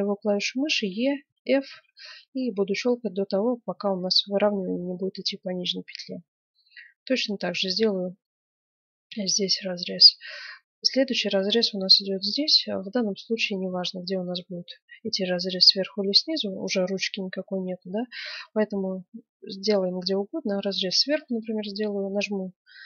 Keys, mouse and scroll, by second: 9.9-11.4 scroll down 2, 9.9 middle click, 11.4-13.6 middle drag, 13.6 ctrl+r, 13.9 middle click.